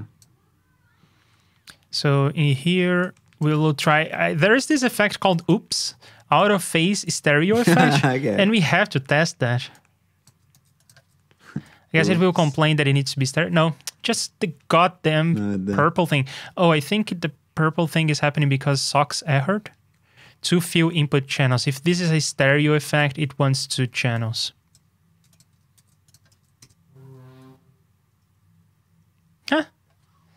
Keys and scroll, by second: 4.0 super+Tab, 7.5 super+c, 7.7 super+Tab, 8.6 super+v, 10.5 super+c, 10.9 super+v, 25.7 super+c, 26.3 super+v.